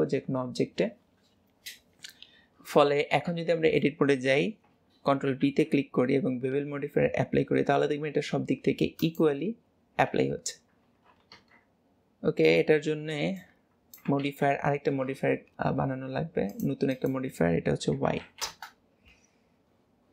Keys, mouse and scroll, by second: 5.5 ctrl+b, 10.6-11.7 scroll down 1, 16.6-20.1 drag.